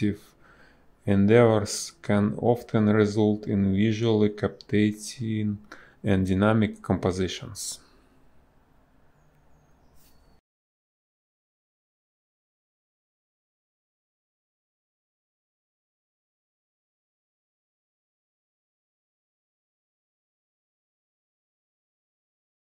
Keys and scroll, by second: 2.0 ctrl+z, 2.8 space, 4.0 space, 5.8 ctrl+z, 5.8 space, 6.8 a, 7.3 Delete, 7.9 b, 10.2 space, 14.2 space, 18.3 space, 21.1 space.